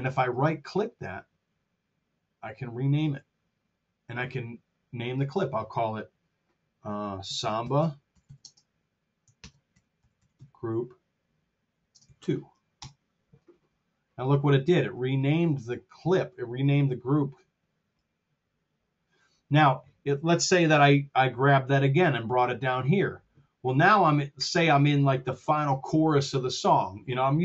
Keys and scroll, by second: 7.3-10.8 typing, 11.8 space, 12.0 2, 12.6 Return.